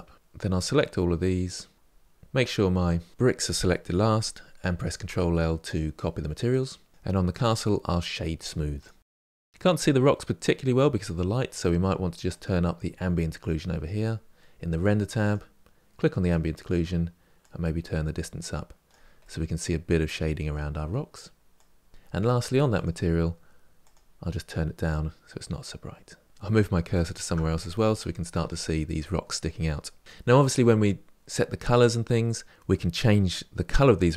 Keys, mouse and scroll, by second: 0.1-1.7 middle drag, 1.7-3.1 scroll up 4, 3.1 shift+click, 6.5 ctrl+l, 6.9 click, 8.7-9.0 right drag, 9.0-15.1 middle drag, 15.1 click, 17.5-19.1 drag, 19.1-21.5 middle drag, 21.5 click, 21.9 scroll down 3, 24.7 click, 26.3 click, 26.8-28.7 shift+right drag, 32.5-33.7 scroll up 6.